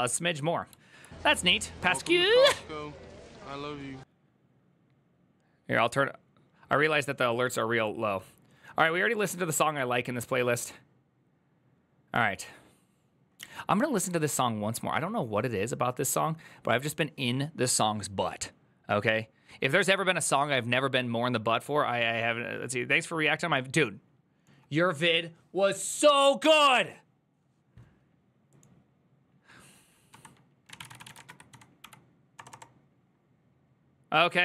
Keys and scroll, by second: 29.9-32.1 typing, 32.3 Return.